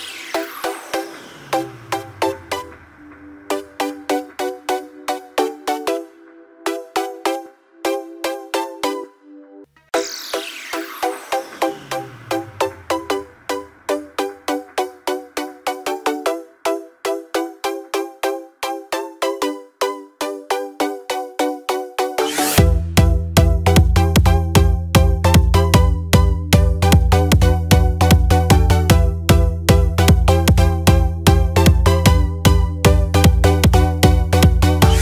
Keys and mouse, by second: 5.3 click, 5.9-8.6 middle drag, 9.3 click, 11.6 click, 15.6 alt+d, 22.9-24.0 middle drag, 24.0 click, 25.9 click, 28.0 click, 28.8-31.6 right drag, 31.6 click, 34.0-35.0 middle drag.